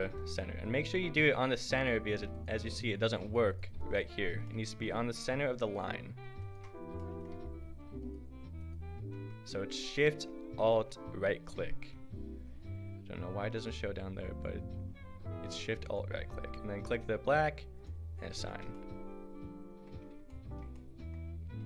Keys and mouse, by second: 0.0 click, 0.2 right click, 0.8-12.5 drag, 15.9-17.9 drag, 18.5 Tab, 21.4 a.